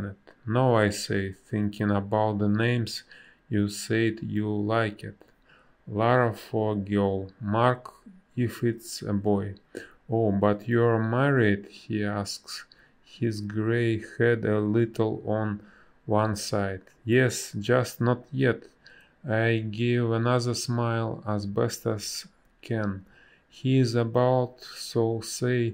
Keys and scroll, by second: 3.2 a, 6.0 space, 7.9 space, 10.7 b, 11.2 space, 15.2 space, 15.8 ctrl+z, 19.0 ctrl+z, 19.2 space, 20.1 space.